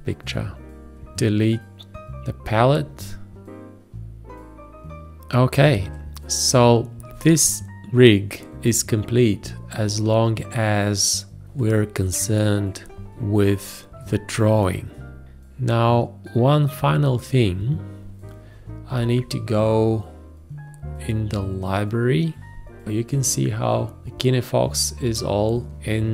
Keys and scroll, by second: 7.1 space, 18.9 ctrl+i.